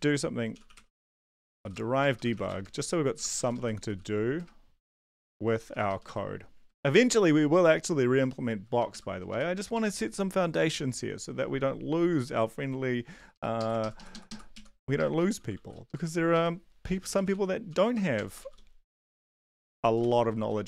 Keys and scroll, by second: 0.0-6.5 typing, 6.8 Down, 8.9 ctrl+shift+Left, 9.3 Up, 9.5 Right, 9.7 Right, 13.3 Left, 13.5 Left, 14.1 ctrl+shift+Left, 14.5 ctrl+shift+Right, 14.9-15.5 typing, 15.8 Left, 16.3 Right, 16.8-19.4 typing.